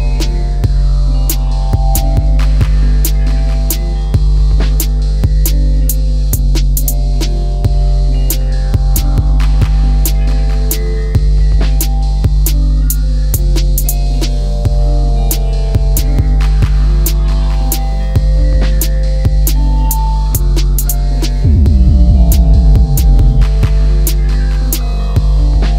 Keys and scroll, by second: 10.1 space, 18.2 space, 19.7 shift+x, 23.3 l, 24.7 space, 25.2 e.